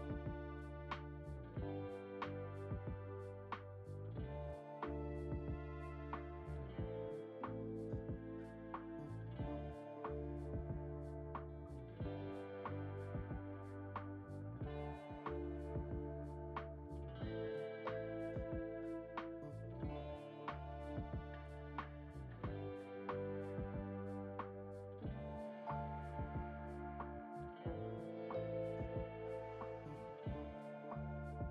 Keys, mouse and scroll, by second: 3.2 click, 3.5-3.8 scroll down 2, 3.8-5.8 shift+middle drag, 5.8-7.0 drag, 8.7-11.7 shift+middle drag, 15.3-17.0 middle drag, 17.7 scroll up 2, 18.2-18.7 middle drag, 18.7 scroll up 1, 19.3 click, 20.3 Tab, 21.7 click, 23.8-26.8 drag, 28.5 scroll down 1, 28.9 Tab, 29.3-29.8 drag, 29.8-31.5 middle drag.